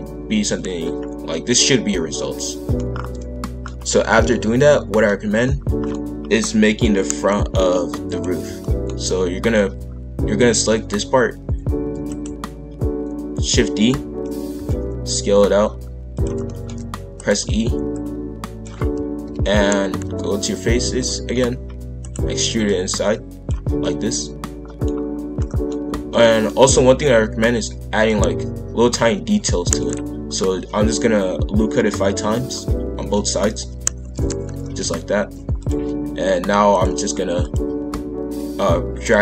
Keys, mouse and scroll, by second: 0.3 KP_5, 0.4 KP_1, 0.9-1.3 scroll up 1, 1.3-2.9 middle drag, 2.9 scroll down 1, 3.2 middle click, 3.8-4.3 scroll up 1, 4.3 middle click, 5.2 scroll up 1, 5.4 middle click, 5.9-7.0 scroll up 1, 7.0 click, 8.1 shift+click, 8.6-11.7 middle drag, 11.9 shift+d, 14.5 s, 16.4 middle click, 17.0 e, 17.9 click, 19.2 ctrl+l, 19.8 KP_5, 20.0 KP_1, 20.9 shift+scroll up 1, 21.0 shift+middle click, 21.6 scroll up 1, 21.8 e, 22.6 click, 23.8-24.9 middle drag, 24.9-25.3 scroll up 1, 25.3-27.8 middle drag, 27.8 ctrl+r, 32.9 ctrl+r, 34.6 shift+f, 36.7 click, 37.6 g.